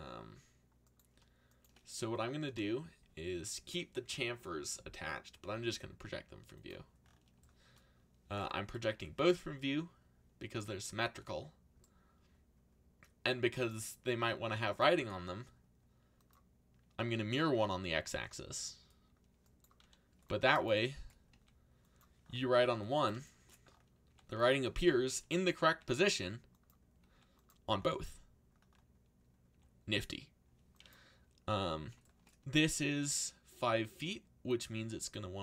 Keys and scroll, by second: 5.4 u, 8.9 z, 10.7 c, 17.9 a, 19.8 c, 21.3 g, 22.6 s, 24.0 g, 24.7 s, 25.6 g, 27.0 g, 29.5 g, 32.4 g, 34.7 s.